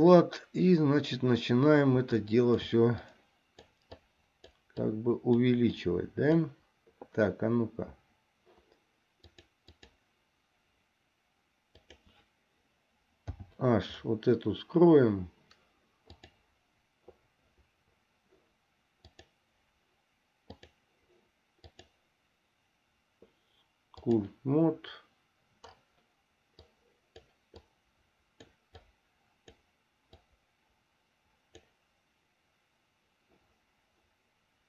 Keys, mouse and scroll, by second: 2.4 shift+click, 3.3 click, 4.2 click, 5.1 click, 6.0 click, 9.4 click, 11.9 click, 13.5 h, 16.3 click, 19.2 click, 20.6 click, 21.8-24.5 drag, 26.8 click, 27.9 click, 29.0 click, 30.5-32.0 drag.